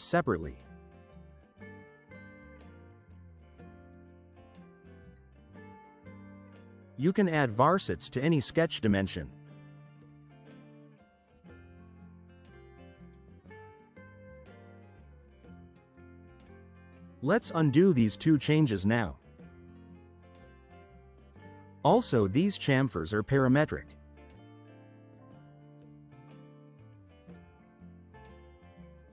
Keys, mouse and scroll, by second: 1.0 click, 2.2 2, 2.4 5, 2.8 Return, 9.5 click, 10.2 1, 10.5 5, 10.8 Return, 16.8 click, 17.7 click, 21.7 click, 24.8 5, 25.5 Return.